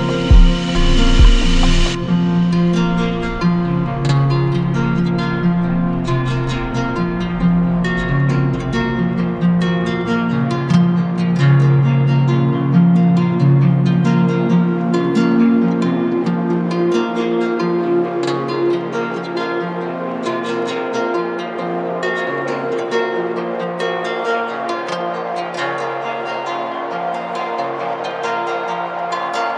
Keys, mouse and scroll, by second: 1.0 click, 2.9 right click, 4.8 alt+click, 5.7 ctrl+z, 8.1-10.2 alt+drag, 10.3-15.0 right drag, 15.0 click, 16.3 click, 17.0 alt+click, 19.2-20.2 drag, 20.3 click, 20.8 alt+right click, 21.9 right click, 22.4 z, 23.4-24.9 drag, 24.9 right click, 27.1 click, 27.4 ctrl+z.